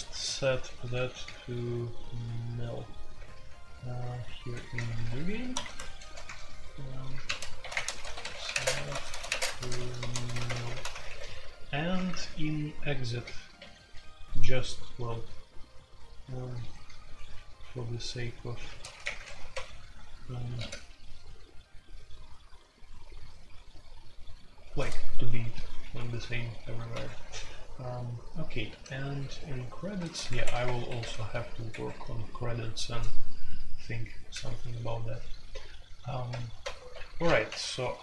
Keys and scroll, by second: 0.0-0.9 typing, 4.7 typing, 4.9 shift+Return, 4.9 Escape, 5.5 Tab, 6.2-14.1 typing, 16.4-16.9 typing, 18.8-20.5 typing, 19.0 Return, 19.1 Escape, 26.9 Escape, 27.0 F2, 28.7-38.0 typing, 30.2 Escape, 30.6 Return, 30.8 Escape, 31.7 Escape, 31.8 F2, 36.6 super+j.